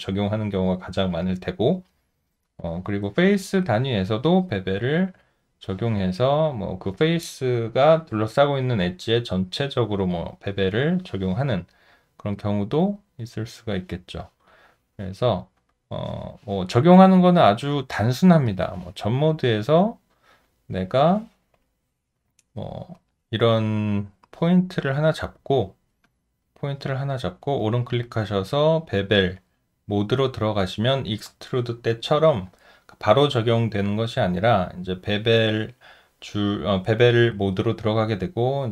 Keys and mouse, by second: 4.2 alt+middle click, 4.9 alt+right click, 12.3 alt+middle click, 12.9 alt+right click, 14.0 alt+middle click, 19.2 alt+middle click, 19.7 alt+right click, 25.0 alt+right click, 25.7 alt+middle click, 26.0 alt+click.